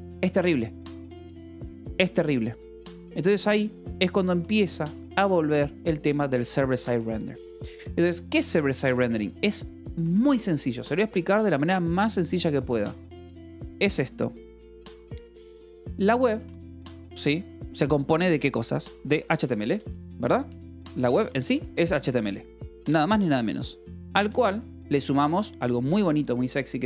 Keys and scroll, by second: 2.2 shift+g, 3.8 k, 4.8 shift+v, 6.4 j, 7.3 Escape, 8.1 l, 9.5 o, 9.8 Escape, 10.6 o, 10.9 Escape, 12.5 a, 15.3-16.7 typing, 18.8-22.1 typing, 23.7 a, 23.9 space, 25.0 =, 25.6 BackSpace, 26.3 =.